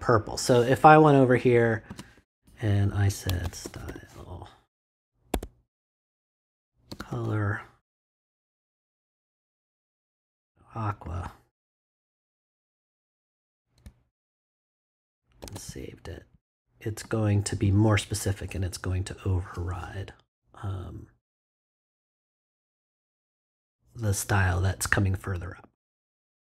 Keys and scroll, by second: 1.9 space, 3.0-4.3 typing, 5.3 Tab, 6.6-7.6 typing, 15.4 super+s.